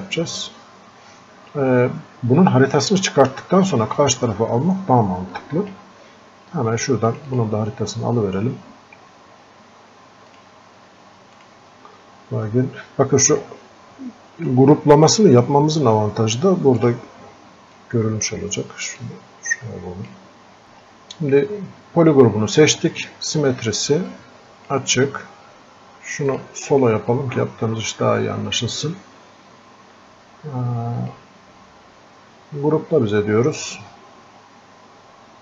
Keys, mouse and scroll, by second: 5.4-7.1 drag, 10.3 click, 16.8-19.1 drag, 19.1-35.4 drag.